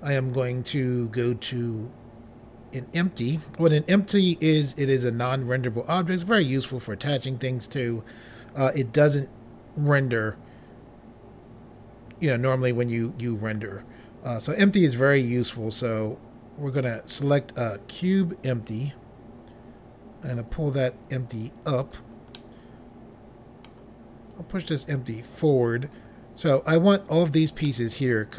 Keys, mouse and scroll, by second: 18.0 click, 20.2 click, 22.3 middle click, 24.8 click, 27.6 middle click.